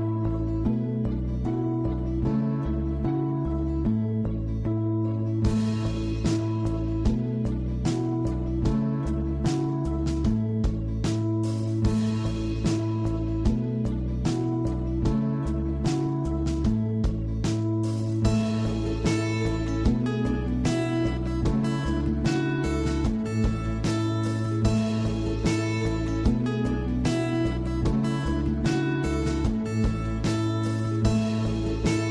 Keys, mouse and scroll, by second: 1.9 scroll up 3, 2.1-2.6 middle drag, 2.6-4.4 scroll down 1, 4.4-4.7 scroll down 1, 4.7 click, 5.5 scroll down 1, 5.6-6.1 middle drag, 6.1 scroll up 5, 6.4-7.1 middle drag, 7.1 scroll down 2, 7.3-9.1 middle drag, 9.1 click, 11.2 click, 12.1-12.9 middle drag, 12.9 scroll up 1, 13.0 scroll down 1, 13.1-15.7 middle drag, 15.7 click, 16.6 scroll down 1, 16.7-18.8 middle drag, 18.8 scroll down 3, 19.1-20.1 middle drag, 20.1-20.5 scroll up 6, 20.5 shift+middle click, 20.8 scroll down 3, 21.0-23.3 middle drag, 23.3-26.5 drag, 27.8-29.6 drag, 29.6 scroll down 3, 29.7 scroll up 1, 29.8-30.3 middle drag, 30.3-32.0 scroll up 1, 32.0 click.